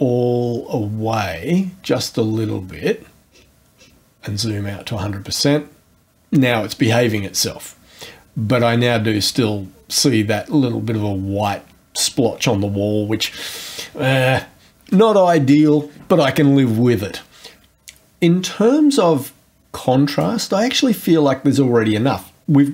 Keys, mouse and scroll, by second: 3.3-4.1 scroll down 4, 8.8-9.8 scroll up 2, 13.5-14.2 scroll down 2.